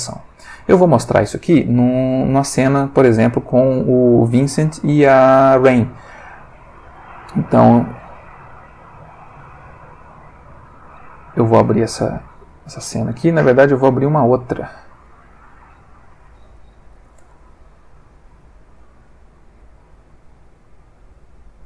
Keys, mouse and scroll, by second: 9.3 click, 17.0 alt+F4, 18.2 click, 20.2 click, 21.1 click.